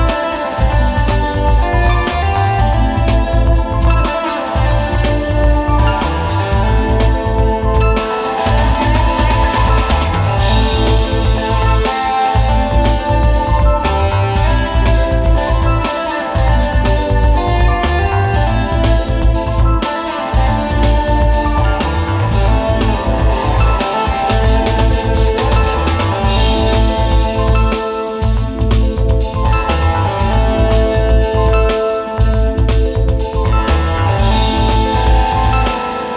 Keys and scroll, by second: 22.0 super+Tab, 29.8 space, 31.6 space, 33.0 space.